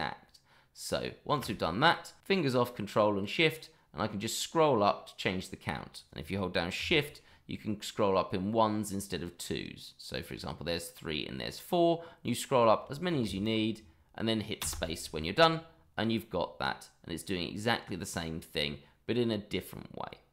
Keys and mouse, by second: 14.6 space, 15.3-16.6 middle drag.